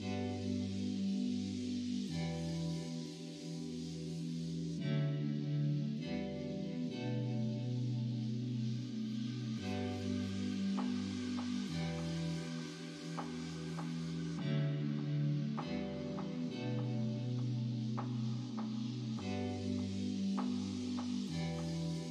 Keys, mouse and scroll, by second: 0.3 click, 1.9 l, 3.4 p, 14.8-15.9 middle drag, 16.7 click.